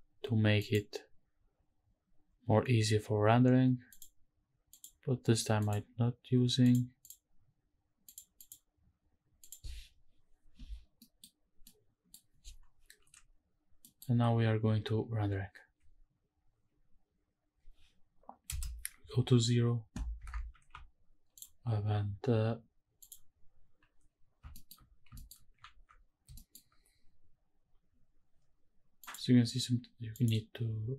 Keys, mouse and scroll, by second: 0.7 click, 4.0 click, 4.7 click, 5.6 click, 6.6 click, 7.0 click, 8.0 click, 8.4 click, 9.4 click, 9.9-10.8 scroll up 2, 10.8 scroll down 1, 11.0 middle click, 11.4 scroll up 1, 11.6 middle click, 13.8 middle click, 18.4 KP_0, 19.2-19.5 scroll up 2, 19.5-20.1 scroll down 1, 20.1 scroll down 1, 20.3 shift+`, 21.3 click, 23.4 click, 24.5 shift+middle drag, 24.8 scroll up 1, 25.2 shift+middle click, 25.7 ctrl+s, 26.3 shift+middle click, 29.0 click, 30.1 click.